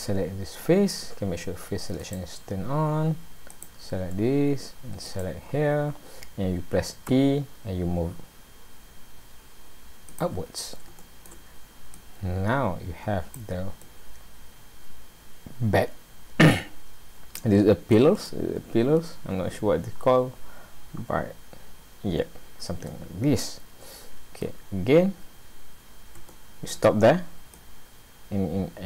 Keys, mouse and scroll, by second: 2.0 click, 3.5 click, 5.1 shift+click, 5.8-6.2 scroll down 1, 7.1 e, 10.4-10.9 scroll down 4, 11.0 shift+middle click, 12.0 click, 13.8 middle click, 17.9 middle click, 19.9-20.2 scroll up 2, 22.2 scroll down 1, 22.9 middle click, 24.7-25.1 scroll down 1, 26.3 shift+middle click, 27.6 click.